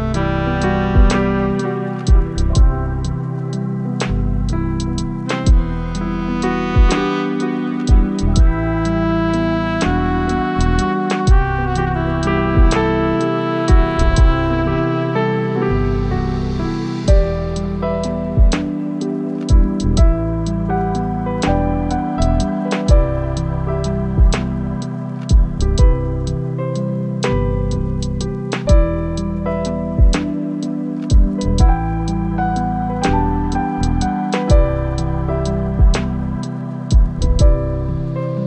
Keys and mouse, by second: 2.6 shift+d, 3.6-9.5 drag, 10.3 click, 10.6 click, 11.1 click, 12.1-12.8 drag, 13.6 t, 16.7 click, 18.0 shift+middle click, 19.4 click, 20.8 ctrl+z, 23.1 click, 26.0-28.0 drag, 28.5 ctrl+z, 31.0 click, 32.6-33.8 drag, 35.0 click, 37.0 click, 38.2 ctrl+z.